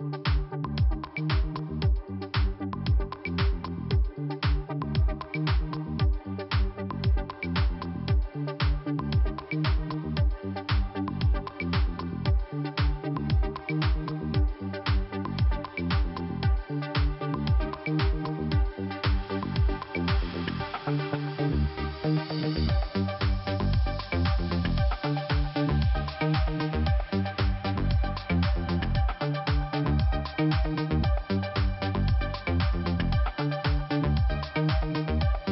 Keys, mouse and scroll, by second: 0.3 click, 1.6 click, 2.8 click, 3.1 click, 4.7 click, 6.6 click, 7.3 click, 8.0 click, 9.3 click, 9.6 click, 10.1 click, 10.2 click, 11.0 click, 13.1 click, 14.0 click, 15.4 click, 17.6 click, 21.0 click, 22.2 click, 23.9 click, 24.0 click, 24.6 click, 26.3 click, 27.8 click, 28.5 click, 29.5 click, 30.4-30.7 scroll down 2, 31.4 click, 34.7 scroll up 1, 35.3 click, 35.4 click.